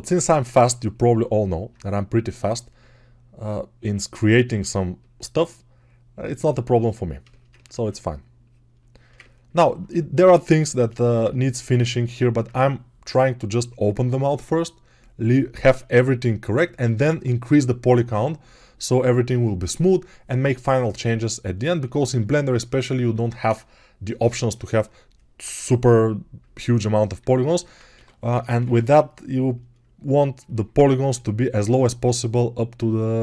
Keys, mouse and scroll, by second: 27.0 alt+q, 27.8 g, 28.2 ], 28.3 ], 28.5 ].